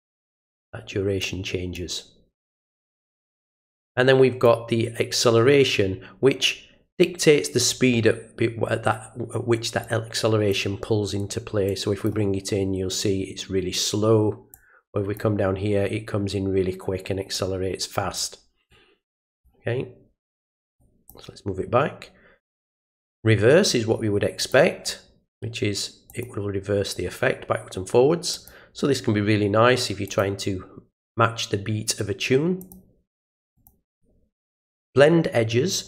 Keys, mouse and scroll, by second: 1.7-4.4 drag, 9.8 click, 11.6 click, 14.5 click, 17.3 click, 18.7 click, 20.8 click, 24.4 click, 26.1 click, 28.3 click, 30.0 click, 32.6 click, 33.5 click.